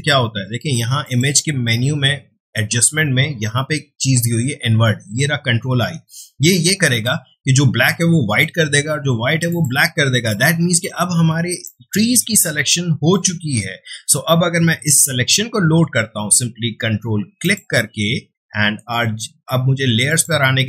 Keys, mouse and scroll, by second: 1.0 click, 9.5 click, 10.1 space, 10.2 click, 11.6-17.4 ctrl+drag.